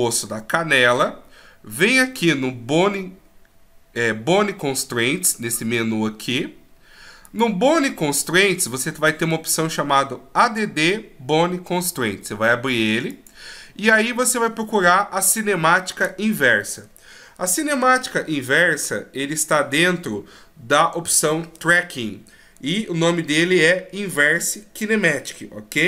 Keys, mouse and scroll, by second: 7.2 click, 13.1 click.